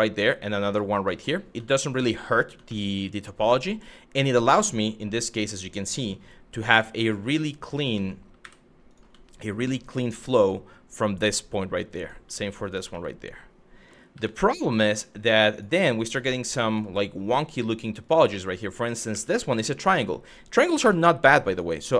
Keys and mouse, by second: 0.3 click, 0.7 shift+middle click, 1.3 shift+middle click, 2.4 shift+middle click, 3.2 shift+middle click, 6.3 2, 6.8 click, 7.6 ctrl+z, 8.0 w, 9.2 shift+click, 10.0 f, 11.6 click, 12.2 click, 12.5 f, 13.8 1, 14.2 click, 14.6 g, 15.2 click, 15.6 click, 15.7 g, 16.3 click, 16.9 click, 17.6 click, 18.7 2, 20.4 f, 21.1 click.